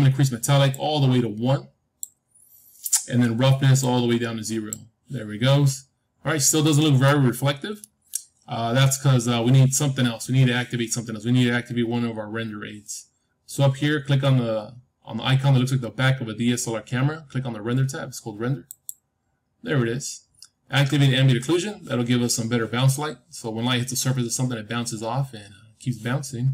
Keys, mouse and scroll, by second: 0.6-2.6 drag, 3.7-5.7 drag, 5.7-9.8 middle drag, 18.6-20.6 drag.